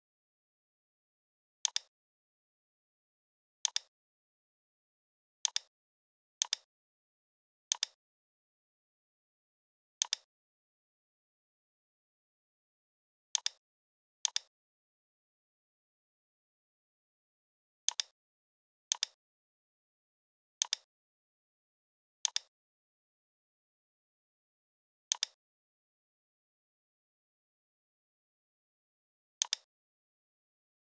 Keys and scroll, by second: 8.4 ctrl+c, 11.1 ctrl+f, 15.2 ctrl+7.